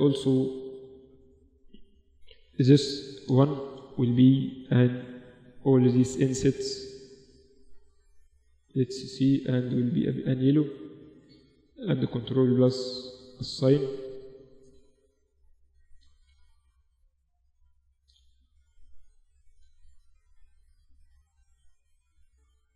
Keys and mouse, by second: 0.7 Tab, 1.5 KP_Divide, 2.2 Tab, 3.4-6.0 drag, 8.4 shift+click, 10.3 Tab, 10.8 Tab, 11.4 ctrl+KP_Add, 13.4 Tab, 14.1 Tab, 15.8 Tab, 18.2 Tab, 21.7 z, 22.0 a.